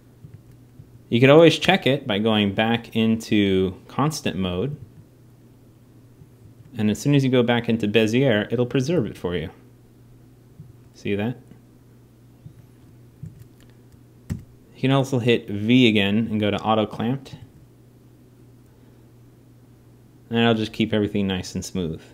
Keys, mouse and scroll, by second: 2.4 a, 2.4 t, 3.7 t, 4.9 alt+a, 6.3 alt+a, 7.4 t, 8.3-10.0 drag, 8.6 alt+a, 10.4 alt+a, 12.4 alt+a, 14.0 alt+a, 16.8-19.6 drag, 17.1 alt+a, 21.9 alt+a.